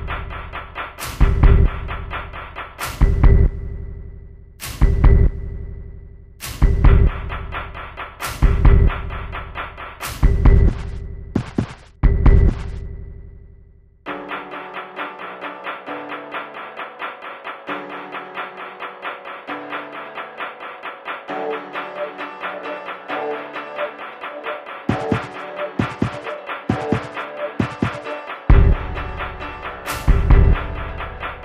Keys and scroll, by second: 0.7 BackSpace, 20.9 Right, 21.0 Right, 21.5 Left, 22.1 Right, 22.7 Left, 23.4 Left, 23.6 Right, 24.6 Left, 29.7 Left.